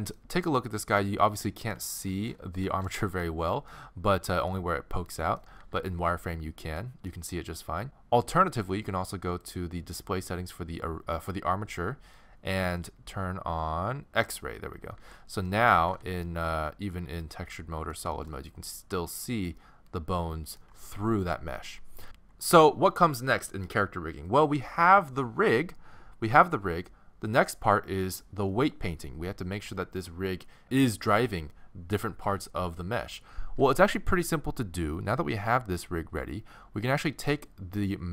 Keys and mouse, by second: 1.4-4.5 middle drag, 5.6 z, 11.3-14.3 middle drag, 14.3-15.5 drag, 14.9 z, 15.9 alt+z, 19.5-20.6 middle drag, 22.0-37.3 middle drag, 37.3-38.1 right drag.